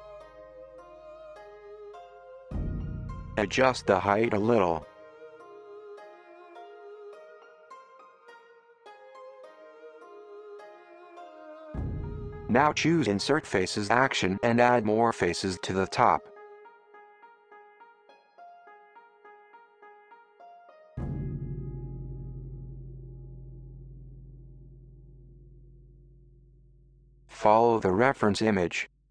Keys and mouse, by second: 0.3 KP_1, 3.4 click, 3.9 alt+click, 4.3 g, 11.9 middle click, 12.3-17.7 drag, 19.6 ctrl+i, 20.1-21.5 drag, 21.0 super+z, 21.3 super+z, 21.7-23.8 drag, 24.0-25.9 drag, 24.5 super+z, 24.9 super+z, 25.6 KP_1, 26.6-29.1 drag.